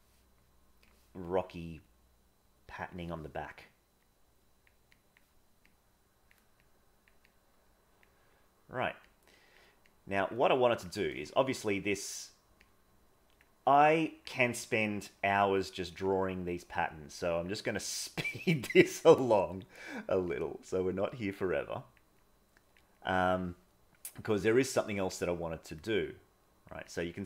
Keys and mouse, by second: 1.9-2.9 drag, 4.1 click, 5.0 click, 5.7 click, 6.5 click, 7.3 click, 8.4 click, 9.1 click, 9.9 click, 10.6 click, 11.7 middle click, 12.6 click, 13.7 click, 14.5 click, 15.7 click, 16.3 click, 17.2 click, 17.7 click, 18.5 click, 19.1 click, 19.7 click, 20.2 click, 21.2 click, 22.1 click, 23.0 click, 23.8 middle click, 25.1 click, 26.1 click, 26.9 click.